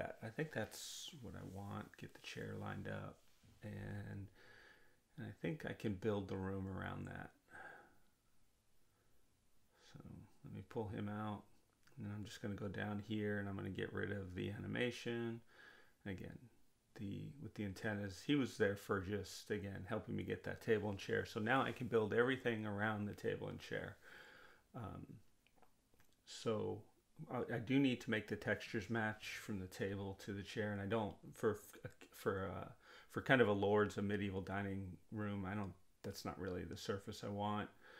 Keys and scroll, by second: 5.5 w, 14.9 Delete.